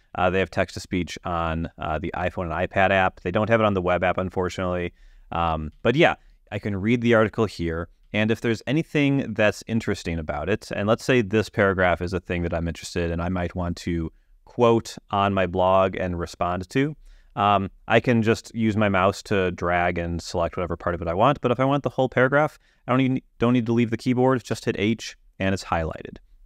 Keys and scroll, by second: 0.2 Up, 5.9 Down, 8.2 Down, 24.7 h.